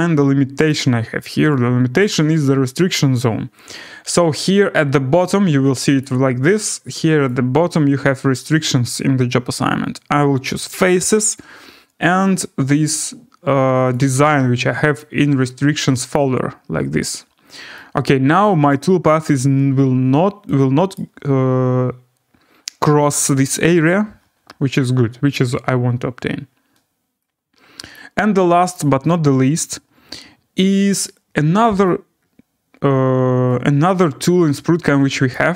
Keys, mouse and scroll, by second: 0.7 click, 2.0 middle click, 2.3 scroll, 6.0 click, 7.3 click, 10.8 click, 13.0 click, 13.9 click, 14.3 click, 15.0 click, 16.1 click, 17.1 click, 18.7 middle click, 20.9 right click, 22.1 scroll, 22.1 scroll down 3, 27.9 click, 28.7 click, 31.8 click, 32.2 scroll down 6, 32.7 scroll up 3, 33.2-33.5 scroll, 35.3 right click.